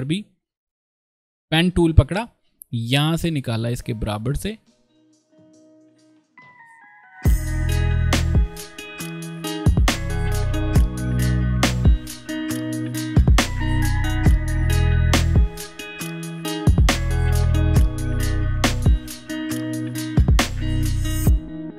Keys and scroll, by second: 1.6 p, 6.5 shift+v, 6.7 alt+shift+m, 6.9 ctrl+alt+shift+space, 7.2 p, 8.5 shift+v, 9.0 shift+m, 9.4 alt+v, 9.5 ctrl+space, 9.8 p, 9.9 ctrl+space, 10.6 ctrl+z, 11.6 ctrl+space, 11.9 ctrl+z, 11.9 v, 12.3 shift+m, 12.5 alt+v, 12.6 ctrl+space, 12.8 ctrl+space, 13.5 ctrl+space, 14.1 ctrl+space, 14.6 p, 15.8 ctrl+space, 16.1 shift+v, 16.7 i, 16.8 ctrl+v, 16.9 ctrl+space, 17.3 ctrl+shift+c, 17.5 v, 17.6 ctrl+space, 18.6 ctrl+space, 18.9 p, 20.6 ctrl+space, 20.9 ctrl+shift+v.